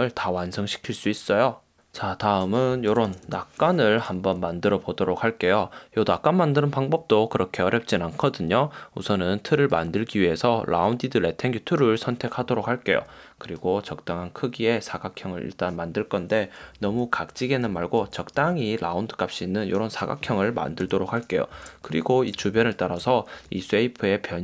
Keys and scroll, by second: 2.9 super+=, 16.8 Down, 21.0 v, 21.7 space.